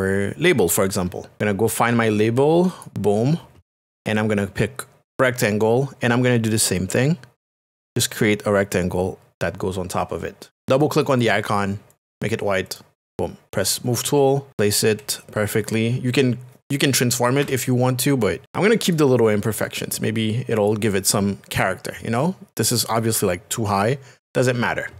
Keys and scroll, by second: 14.5 Right, 14.9 Down, 17.4 Up.